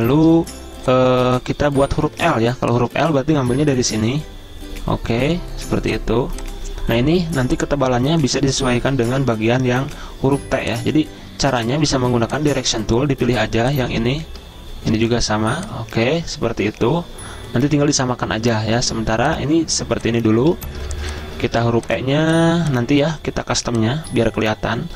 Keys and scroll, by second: 0.3 space, 20.4 z, 21.6 v, 23.8-24.5 typing.